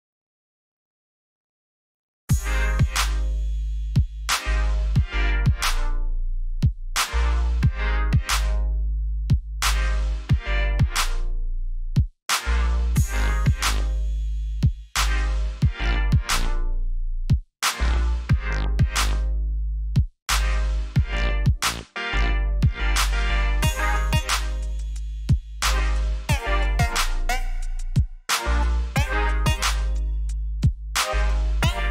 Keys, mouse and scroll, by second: 0.4 alt+scroll up 1, 1.6 click, 5.8 alt+scroll down 1, 6.7 alt+scroll up 1, 8.1 click, 10.6-11.0 alt+scroll down 1, 11.5 alt+scroll up 1, 13.0 click, 15.8 alt+click, 17.3 click, 18.5 alt+scroll down 1, 19.1 alt+scroll up 1, 19.8 scroll up 1, 22.6-23.3 alt+scroll up 4, 25.5 scroll up 1, 26.8 ctrl+j, 31.0 click.